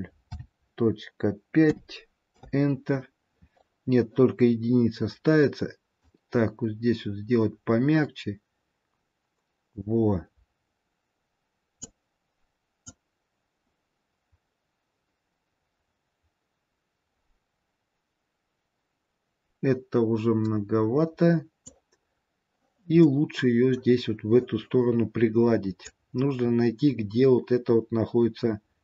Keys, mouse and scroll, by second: 6.0 click, 12.7 click, 23.2 middle click, 25.8 click.